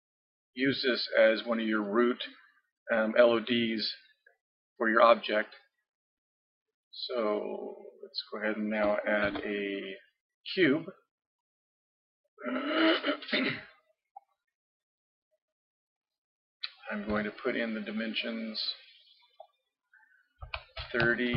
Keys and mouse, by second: 9.3 shift+a, 17.1 n, 19.4-21.2 drag.